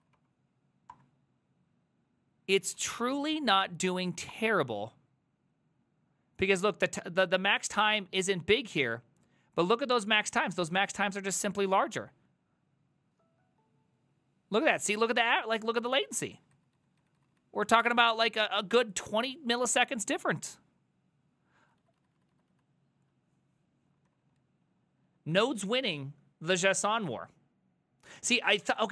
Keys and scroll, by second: 0.0-0.5 typing, 0.9 Return, 2.8 ctrl+a, 3.0 2, 3.4 Up, 4.3 Return, 4.5 alt+[, 11.3 alt+{, 16.2 ctrl+a, 16.4 [, 16.6 ctrl+u, 16.8 ctrl+u, 17.0 ctrl+u, 17.2 ctrl+u, 17.4 ctrl+u, 17.7 ctrl+u, 20.0 ctrl+d, 20.2 ctrl+d, 20.3 ctrl+d, 20.5 ctrl+d, 20.6 ctrl+d, 20.7 ctrl+d, 21.6 ctrl+u, 21.8 ctrl+u, 22.0 ctrl+u, 22.2 ctrl+u, 22.4 ctrl+u, 22.5 ctrl+u, 24.1 ctrl+d, 24.2 ctrl+d, 24.4 ctrl+d, 24.5 ctrl+d, 24.6 ctrl+d, 24.8 ctrl+d, 24.9 ctrl+d, 25.1 ctrl+d.